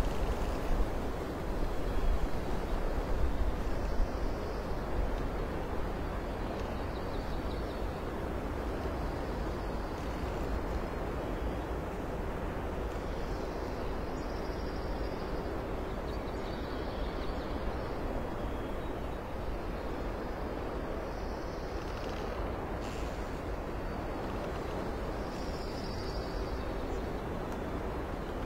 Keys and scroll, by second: 8.1 ctrl+alt+shift+z, 11.1 ctrl+z, 12.2 ctrl+z, 12.9 ctrl+d, 13.2 ctrl+d, 14.1 ctrl+z, 14.8 ctrl+z, 15.0 ctrl+h, 15.6 ctrl+z, 18.1 ctrl+z, 21.8 space, 22.7 alt+space, 24.8 ctrl+z, 25.7 ctrl+h, 26.9 space.